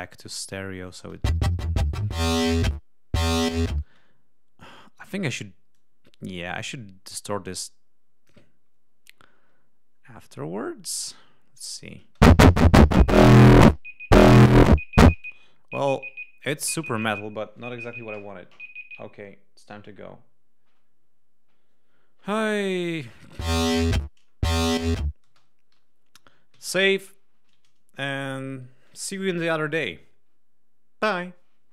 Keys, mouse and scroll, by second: 1.0 space, 3.8 space, 5.7-8.4 drag, 10.9 click, 12.0 space, 15.0 space, 15.2-17.2 drag, 22.8 click, 23.0 space, 25.2 space, 26.5 ctrl+s.